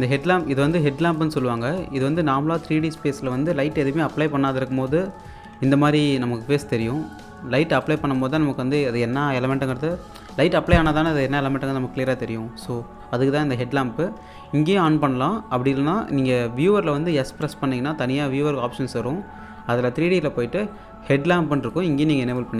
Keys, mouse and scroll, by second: 2.3 scroll up 1, 2.7 alt+click, 5.9-10.2 alt+drag, 7.8 typing, 14.9 click, 17.1 click, 17.3 s, 20.0 click, 21.6 click.